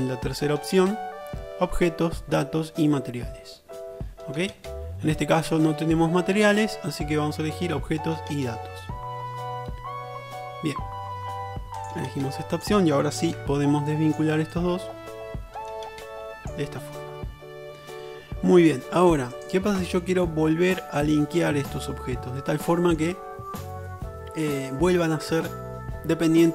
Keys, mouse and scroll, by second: 12.8-16.7 drag, 13.4 Tab, 16.7 middle click, 17.2-19.6 drag, 18.6 Tab, 19.6-26.5 shift+middle drag.